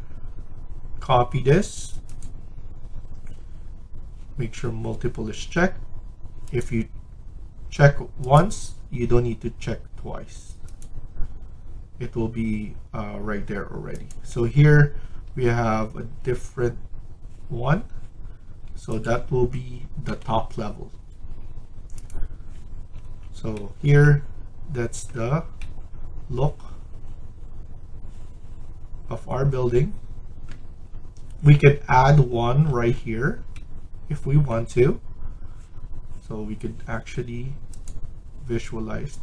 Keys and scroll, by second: 15.2 Escape, 15.4 Escape, 15.7 Escape, 20.0 Delete.